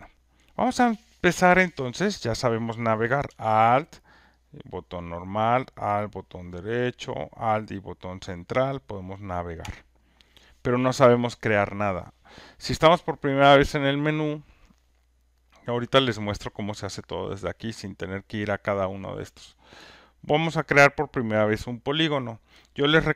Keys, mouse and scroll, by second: 5.0-7.1 alt+drag, 7.1 alt+right click, 9.5 alt+middle click, 12.6-14.7 alt+middle drag, 20.1-23.1 drag.